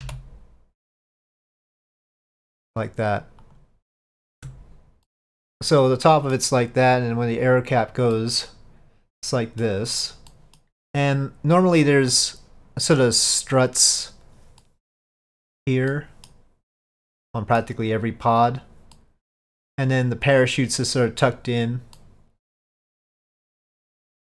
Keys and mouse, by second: 4.5 Tab, 5.1-6.4 middle drag, 7.5 click, 8.2-9.7 middle drag, 10.4 middle drag, 14.7-15.0 middle drag, 16.0-16.4 middle drag, 17.3-17.7 middle drag, 19.0-19.7 middle drag, 22.1-23.5 middle drag.